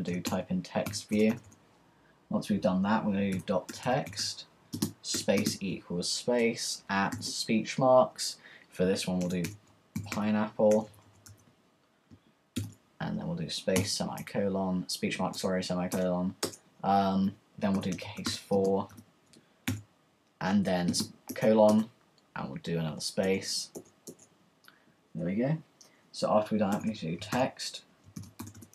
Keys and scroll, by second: 0.0-7.6 typing, 8.7-12.5 typing, 14.1 typing, 14.2 Return, 17.5-21.4 typing, 26.7-28.7 typing.